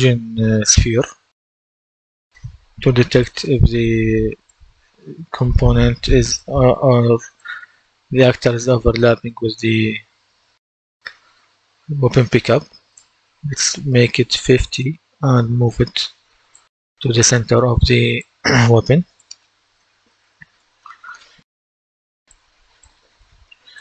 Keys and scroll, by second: 0.7-1.1 typing, 13.7 KP_5, 14.2 Return.